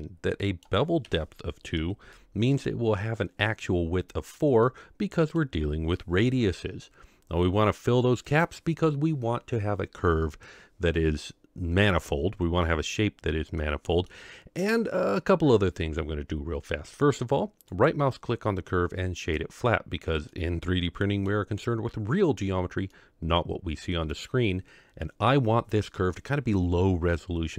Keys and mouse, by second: 0.4 middle drag, 1.0 KP_7, 2.1-2.5 shift+middle drag, 4.6-5.4 middle drag, 8.2 click, 13.6-14.0 middle drag, 17.8-19.4 right drag, 20.3-21.2 middle drag, 22.9-24.1 middle drag.